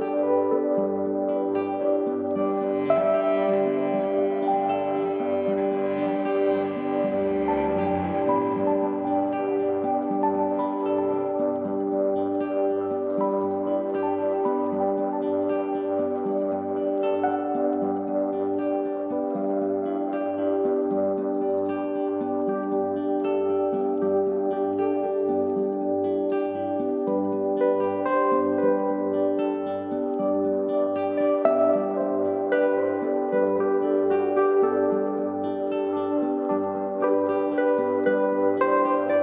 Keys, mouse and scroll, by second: 3.2 click, 5.2-7.3 drag, 7.3 KP_0, 8.9-9.7 scroll down 4, 9.7-11.4 scroll down 4, 11.4 click, 13.6-23.3 drag, 23.5 scroll down 2, 24.3 scroll down 1, 24.4-26.3 drag, 27.7-30.2 drag, 30.2 scroll down 2, 31.9-35.0 drag, 36.7-38.6 scroll down 2, 38.6-39.2 scroll down 1.